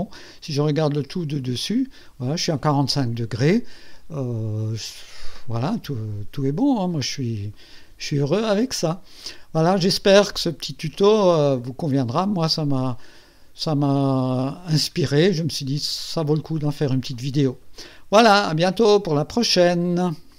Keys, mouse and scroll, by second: 0.9 click, 1.3 KP_2, 9.2-10.1 drag, 12.8 click, 14.5 scroll up 1.